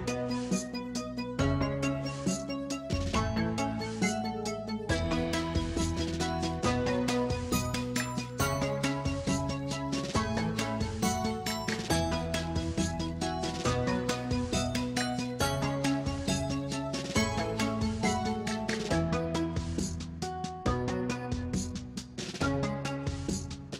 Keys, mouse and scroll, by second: 0.0 click, 0.1 middle click, 0.3 r, 0.5 g, 1.0 click, 1.1-1.5 middle drag, 1.5 g, 1.8-2.3 middle drag, 2.3 r, 2.5 g, 2.7-3.0 middle drag, 3.0 scroll up 6, 3.2 shift+middle click, 3.4-3.7 scroll down 2, 3.5 g, 3.7-4.3 middle drag, 4.3 g, 4.5 scroll down 1, 4.6-5.3 middle drag, 5.3 g, 6.0-6.8 middle drag, 7.0 r, 7.2 middle drag, 7.4 scroll down 1, 7.6 shift+middle click, 8.1-8.6 scroll down 1, 8.6 middle drag, 8.7-9.4 scroll down 1, 9.4 drag, 9.5-9.9 middle drag, 9.9-15.9 typing, 11.4 middle click, 12.1 scroll down 3, 12.1 middle drag, 13.3 click, 13.4 shift+middle click, 13.5 scroll up 2, 13.9 middle click, 14.6-15.3 middle drag, 15.5-15.9 middle drag, 16.1-16.5 middle drag, 16.5 scroll up 4, 16.6-17.2 shift+middle drag, 17.2 click, 17.4 shift+middle drag, 17.6 g, 18.4 click, 18.5 middle click, 18.7 scroll down 4, 18.8-19.3 middle drag, 19.3 scroll down 4, 19.4-19.9 shift+middle drag, 19.9-23.7 typing, 21.8 middle click, 22.7 middle click.